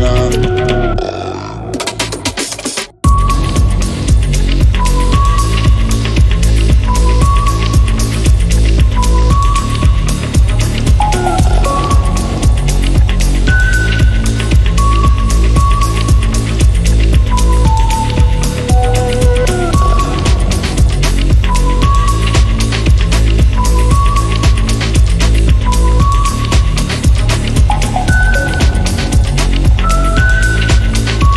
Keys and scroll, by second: 1.1 Escape, 2.5 ctrl+v, 3.8 ctrl+a, 8.2-10.5 typing, 13.3 Escape, 14.4 ctrl+a.